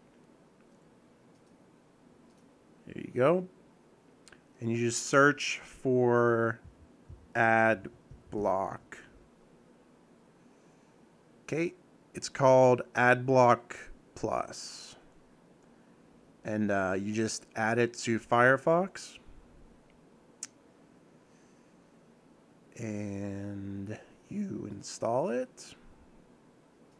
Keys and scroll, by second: 6.7-8.9 typing.